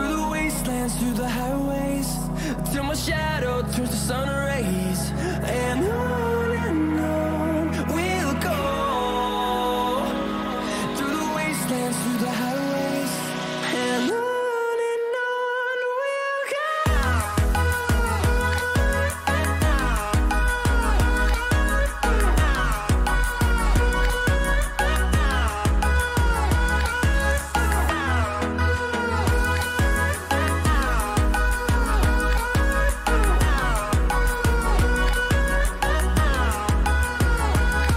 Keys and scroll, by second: 5.3 ctrl+=, 7.0 ctrl+=, 25.8 ctrl+-, 26.5 ctrl+-, 27.2 ctrl+=, 27.9 ctrl+=, 31.6 ].